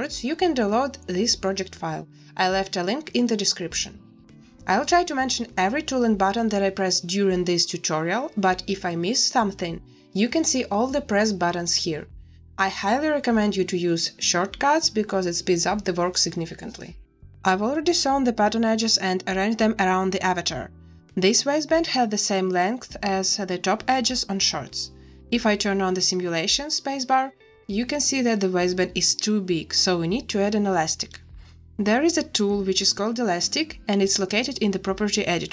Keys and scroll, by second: 11.5 a, 11.6 z, 11.9 a, 20.5 z, 24.9 space, 28.2 space, 29.4 ctrl+z, 31.2 ctrl+z.